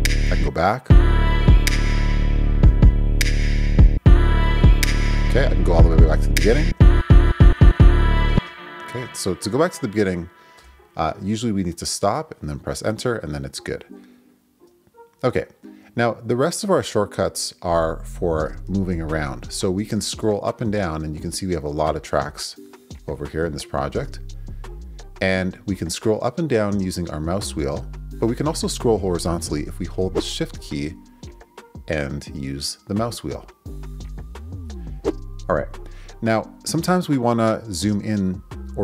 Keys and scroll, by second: 0.4 Left, 3.9 Left, 6.7 Return, 8.3 space, 8.9 Return, 10.6 Return.